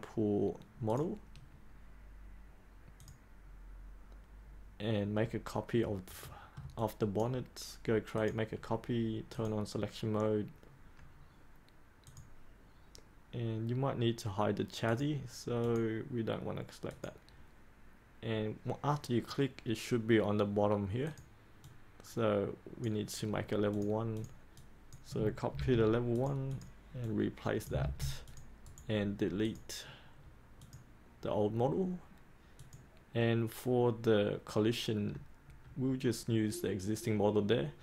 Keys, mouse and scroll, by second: 6.2 middle click, 6.7-23.0 drag, 25.5 ctrl+c, 26.1-27.6 drag, 27.7 ctrl+v, 28.2 click, 28.6 right click, 29.4-37.8 drag.